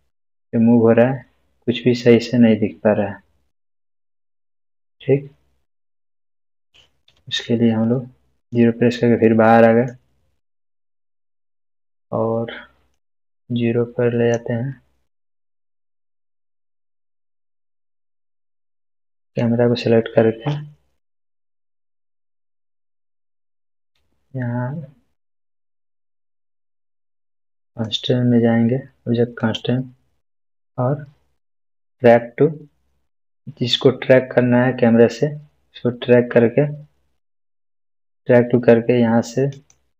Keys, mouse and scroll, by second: 8.4-10.1 middle drag, 10.8 space, 11.6-12.2 middle click, 12.9-14.5 drag, 15.2-16.1 middle drag, 19.2 click, 27.7 click, 28.3 click, 31.9 click, 39.5 click.